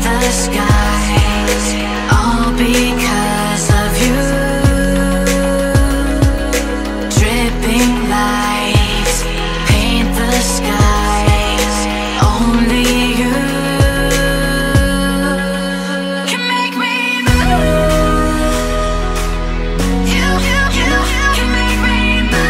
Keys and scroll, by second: 10.6 ctrl+c, 11.6 ctrl+shift+], 12.4 ctrl+-, 19.3 ctrl+-.